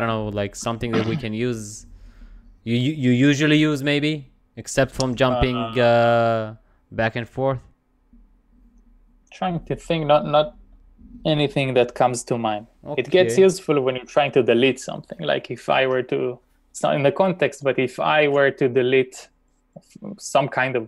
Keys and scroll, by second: 18.3 shift+;.